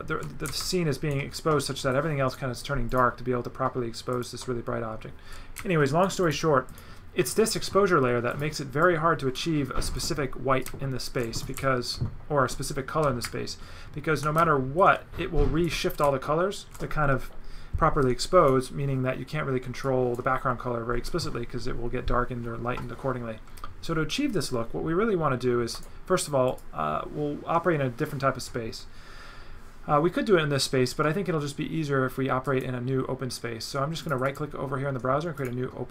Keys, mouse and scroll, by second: 1.8 right click, 2.9 click, 4.1 click, 5.3 right click, 6.0 z, 6.2 click, 6.7 click, 8.3 click, 8.8 click, 10.0 click, 10.6 right click, 11.3 click, 11.6 w, 11.6 right click, 18.2 right click, 19.8 right click, 25.7 right click, 26.5 click, 32.5 right click, 34.0 click, 34.3 right click, 35.4 click.